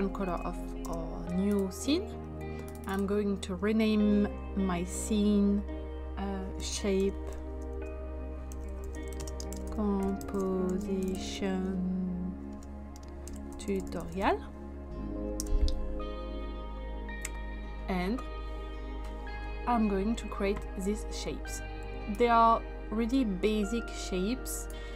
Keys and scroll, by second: 0.2 ctrl+v, 0.8 Return, 6.5-14.7 typing, 15.4 Return.